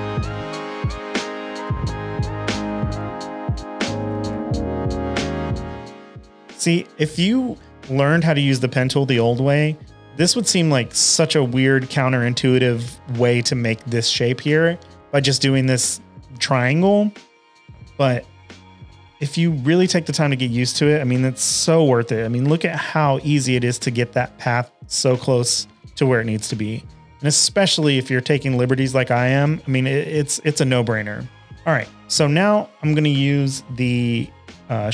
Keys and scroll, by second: 3.7-5.2 typing, 24.5 shift+super+a, 24.7 v, 25.4 super+-, 25.6 super+-, 25.7 super+-, 26.1 super+-, 26.2-28.6 typing, 31.4 space, 31.4 v.